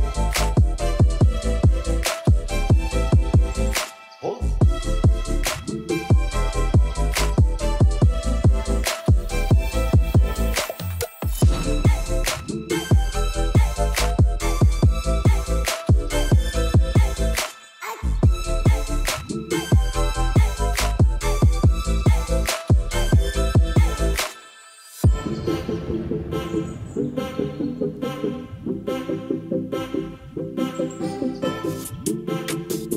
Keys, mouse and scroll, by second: 9.6 click, 10.5 ctrl+s, 11.0 middle click, 11.7 middle click, 13.4 click, 13.7 middle click, 14.8 KP_1, 15.5 KP_0, 18.5 r, 20.3 r, 20.4 x, 22.3 r, 22.6 y, 25.1 click, 25.6 r, 25.8 x, 27.3 middle drag, 27.7-28.3 middle drag, 28.3 KP_1, 28.7 shift+middle drag, 29.1 g, 29.2 z, 30.4 ctrl+s, 30.6 middle click, 30.9 KP_0, 30.9 KP_2, 31.7 middle drag, 32.0-32.5 middle drag, 32.3 click, 32.5 click, 32.6 middle drag, 32.7 click.